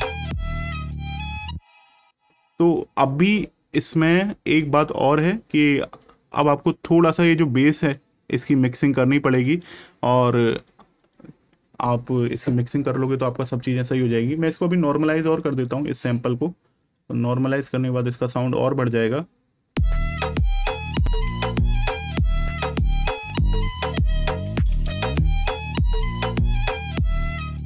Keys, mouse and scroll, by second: 4.1 click, 9.3 click, 15.2 click, 19.6 click, 22.8 click, 26.0 click.